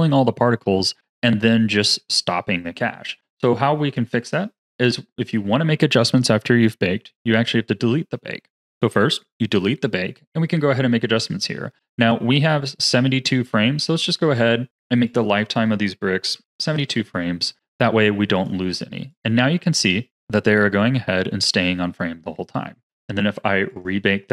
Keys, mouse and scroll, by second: 9.1-11.9 drag, 14.2 click, 15.3-18.1 drag, 18.3-21.4 drag, 22.8-24.3 drag.